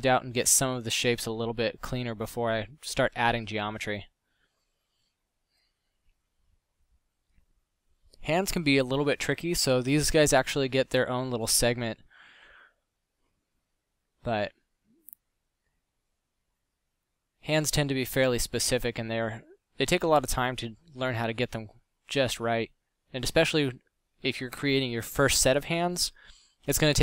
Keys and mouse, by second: 9.0 f.